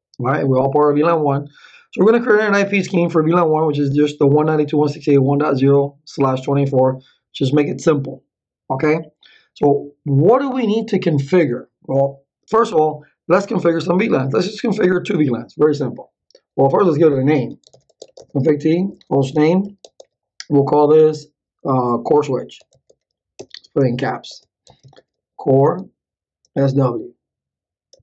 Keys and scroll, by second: 17.2-20.1 typing, 22.3-27.2 typing, 23.8 Caps_Lock, 27.9 Return.